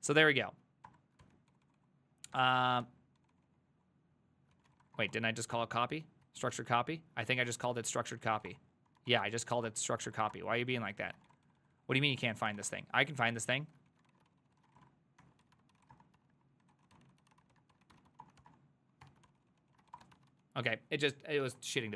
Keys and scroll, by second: 0.0-5.6 typing, 1.3 ctrl+c, 2.9 ctrl+c, 6.3 ctrl+o, 6.6 ctrl+c, 7.0-20.8 typing, 8.0 ctrl+c, 8.1 ctrl+c, 21.5 alt++.